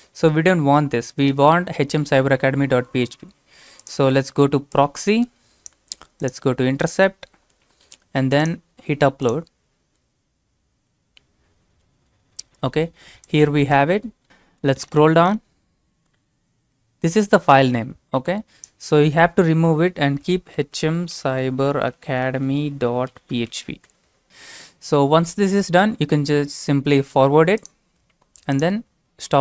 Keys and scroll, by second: 20.1 typing, 23.5-24.7 typing.